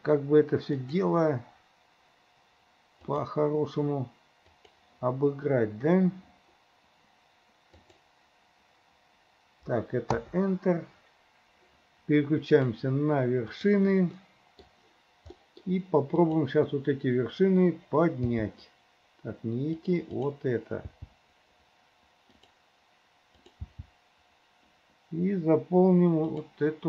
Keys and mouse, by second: 12.5 click, 13.8 click, 14.3 middle click, 15.4 middle click, 16.4 click, 18.4 g, 20.2 click, 21.0 g, 23.8 g.